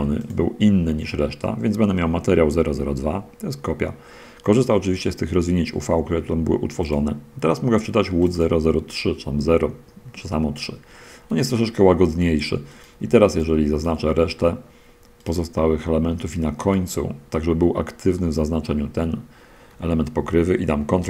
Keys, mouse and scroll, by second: 0.3 click, 7.1 click, 8.5 click, 13.1 click, 13.9 shift+click, 14.7 shift+click, 15.2 shift+right click, 16.0 shift+middle click, 16.6 shift+right click, 18.2-19.4 middle drag, 19.4 click.